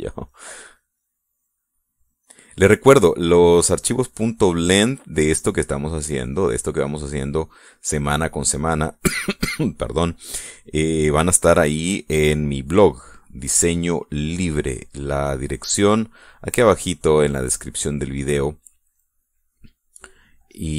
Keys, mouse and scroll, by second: 0.9-5.0 drag, 5.1-6.5 middle drag, 7.0-10.3 drag, 10.5 middle click, 11.0 middle click, 11.6-14.9 drag, 15.0 middle click, 16.2-18.7 drag, 19.1-20.1 middle drag, 20.5-20.7 drag.